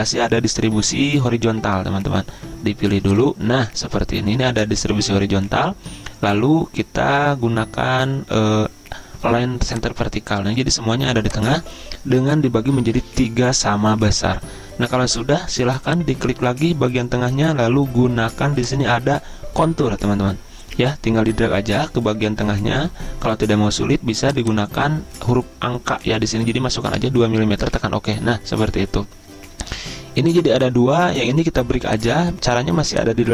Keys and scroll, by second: 27.0 2, 27.7 Return.